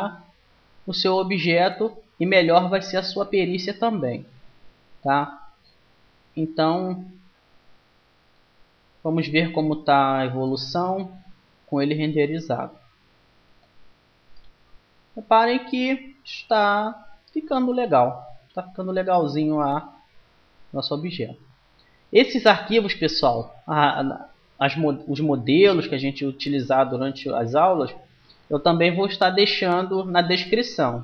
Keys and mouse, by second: 0.8 z, 3.6 Tab, 4.7 middle click, 4.8-6.5 drag, 6.5 middle click, 7.8-9.6 drag, 9.6 middle click, 10.0-12.3 drag, 12.3-23.7 middle drag.